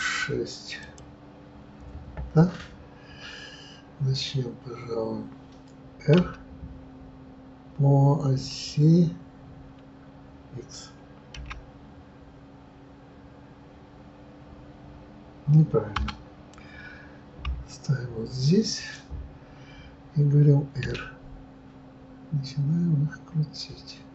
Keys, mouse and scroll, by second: 6.2 r, 17.3 KP_3, 20.8 r.